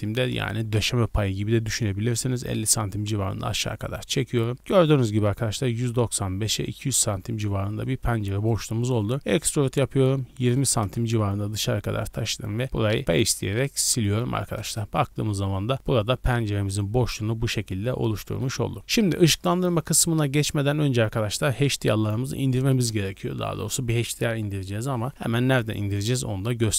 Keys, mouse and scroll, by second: 0.3 KP_Enter, 4.3 right click, 4.5 scroll down 1, 4.6-6.8 shift+middle drag, 7.1 middle click, 7.4 scroll up 2, 7.8-8.8 shift+middle drag, 8.8-9.2 scroll down 1, 9.2 e, 10.3 KP_2, 10.4 KP_0, 10.8 KP_Enter, 12.1 x, 13.5-14.0 middle drag, 14.0 scroll up 1, 14.6 KP_0, 16.7 scroll up 1, 18.2 shift+middle drag, 18.7 Tab, 18.8-19.2 scroll down 2.